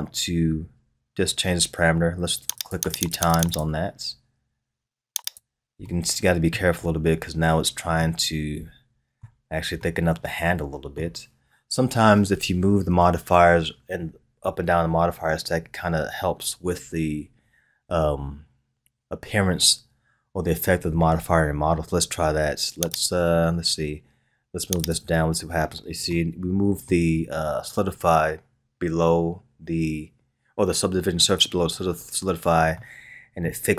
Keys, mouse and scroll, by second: 2.6-4.1 drag, 5.2 click, 5.8-6.8 middle drag, 6.8-8.0 scroll up 2, 8.0-12.8 middle drag, 22.9 click, 24.8-25.6 drag, 26.1-29.1 middle drag, 32.7-33.7 middle drag.